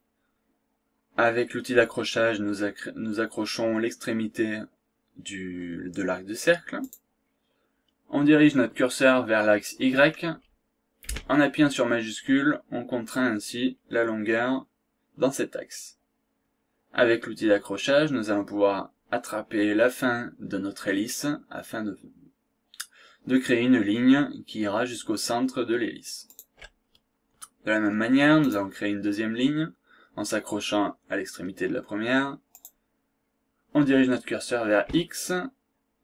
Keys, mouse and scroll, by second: 6.8 click, 26.2 shift+click, 28.5 click, 32.5 click.